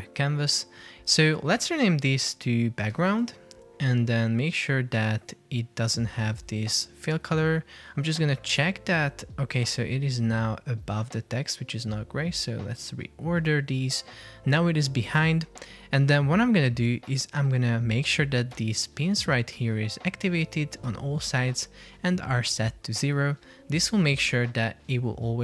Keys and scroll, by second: 0.0 super+v, 2.9 shift+g, 3.2 Return, 21.3 Return.